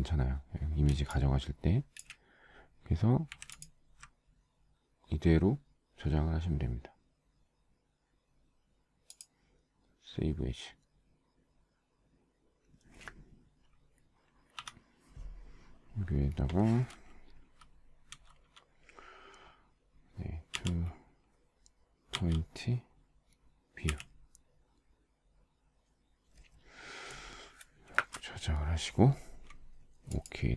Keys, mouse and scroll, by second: 1.3 space, 1.9 space, 2.0 space, 2.1 space, 3.7 z, 3.9 alt+click, 14.7 F9, 20.7 2, 22.3 p, 28.1 Return.